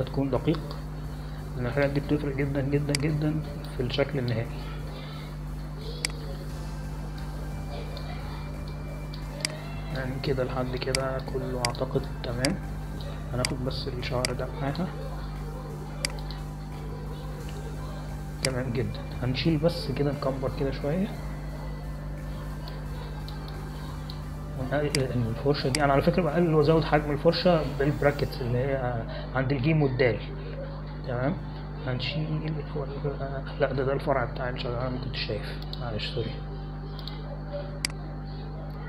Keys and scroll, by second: 9.1 space, 10.5 space, 22.7 ctrl+=, 24.5 space, 27.3 [, 27.5 [, 27.7 [, 28.7 [.